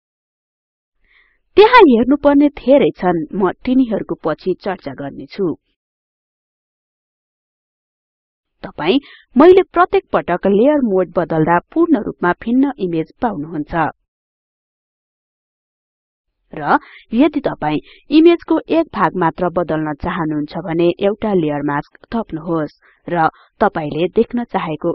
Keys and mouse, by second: 0.5 click, 3.0 click, 7.0 click, 13.0 click, 17.0 click.